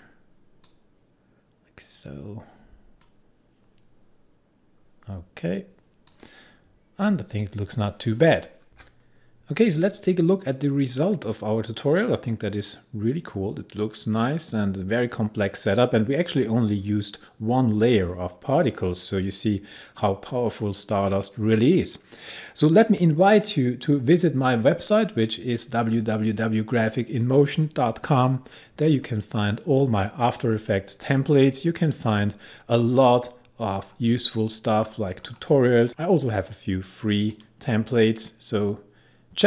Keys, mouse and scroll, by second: 6.2 click, 24.7-28.3 drag, 28.3 scroll down 1, 34.1 scroll up 1, 36.7 click.